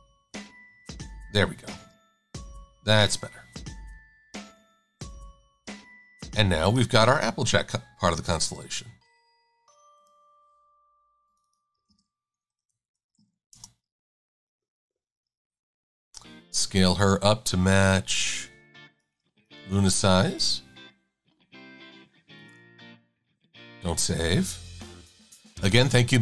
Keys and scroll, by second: 0.5 Right, 1.3 Right, 1.7 Left, 1.9 super+a, 2.5 v, 4.5 super+g, 11.9-13.8 typing, 16.0 e.